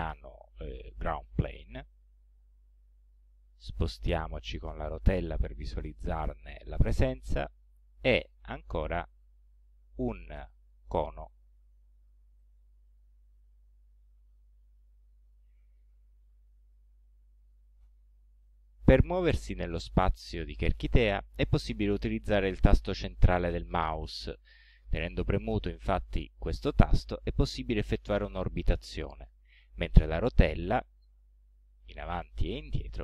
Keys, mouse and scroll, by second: 1.7 click, 3.2-4.0 scroll down 1, 4.0 scroll down 1, 4.1-4.6 scroll up 1, 4.9 scroll down 1, 7.8-10.7 drag, 11.6 click, 12.4-14.6 middle drag, 15.0 scroll down 2, 15.4 scroll up 2, 26.1-29.7 middle drag, 30.9 scroll down 2, 31.5-32.1 scroll up 4, 32.4 scroll down 2, 32.8-33.0 scroll up 4.